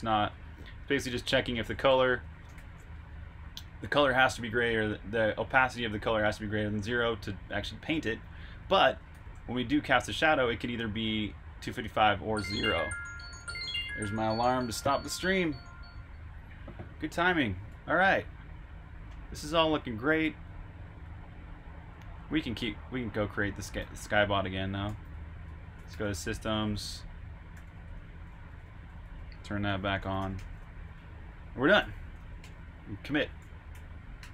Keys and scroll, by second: 4.4-5.3 typing, 8.2-9.5 typing, 12.1 Escape, 12.4 typing, 18.0-19.5 typing, 27.3-30.0 typing, 31.6-33.6 typing.